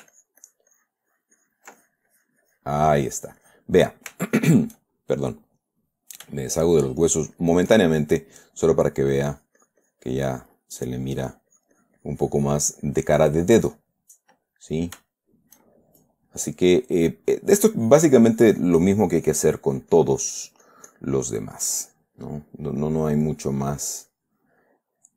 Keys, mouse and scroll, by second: 0.5-2.1 ctrl+shift+drag, 6.2 click, 6.8 shift+middle click, 8.6 middle click, 9.5-11.0 drag, 11.6-14.3 drag, 14.4 middle click, 15.0 middle click, 15.5 shift+middle click, 16.2 shift+middle click, 16.7-18.0 shift+middle drag, 18.2-22.6 drag, 22.6 middle click, 23.2 middle click, 23.6-25.1 drag.